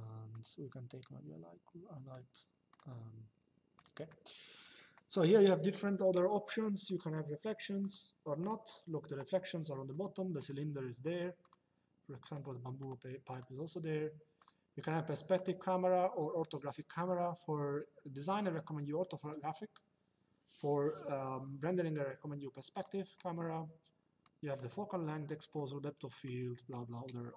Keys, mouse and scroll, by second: 0.0 click, 2.4 click, 3.5 click, 6.6 click, 9.6 click, 22.5 click, 23.9 click.